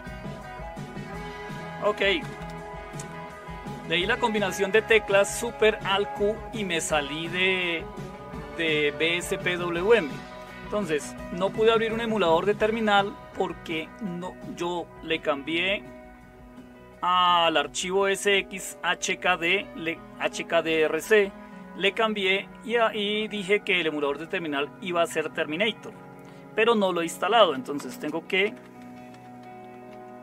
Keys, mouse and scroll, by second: 2.2 Return, 2.4 Return, 27.2-30.2 typing.